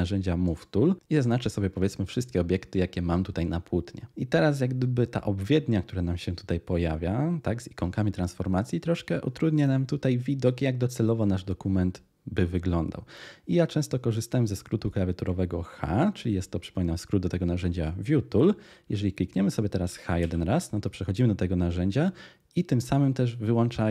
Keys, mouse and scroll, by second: 20.2 h.